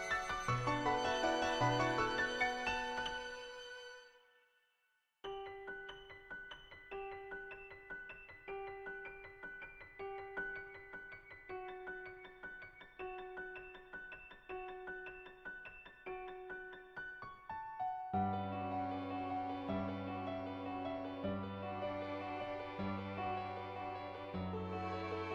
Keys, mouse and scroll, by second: 0.7 /, 1.6-2.9 drag, 3.3 shift+click, 3.6 shift+middle click, 3.9 click, 5.9 click, 6.3 click, 6.9 [, 7.1 [, 7.2 click, 8.3 click, 8.7 ], 8.8 click, 9.2 ], 9.3-10.7 drag, 10.7 [, 11.3 click, 12.7 [, 13.0 click, 14.1 ], 14.2 click, 14.9 click, 15.4 click, 16.9 click, 19.1-20.5 drag, 24.3 [, 24.9 [, 25.2 click.